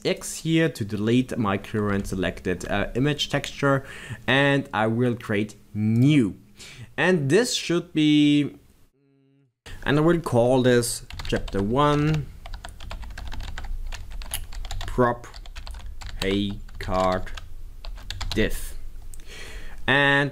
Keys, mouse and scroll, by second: 8.3-11.0 middle drag, 11.0-13.7 drag.